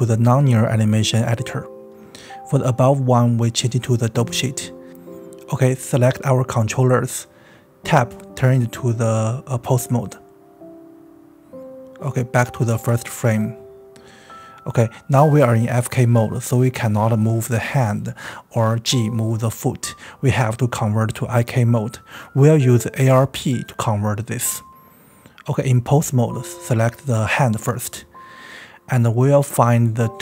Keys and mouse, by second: 1.0-1.6 drag, 3.0-4.5 drag, 6.1 click, 10.7 Tab, 12.5 g, 14.3 click, 15.3 click, 16.2 g, 17.1 click, 17.8 click, 18.5 g, 20.7-21.4 shift+middle drag, 22.6 click, 23.0-23.4 right drag, 24.8 right click, 28.4 right click.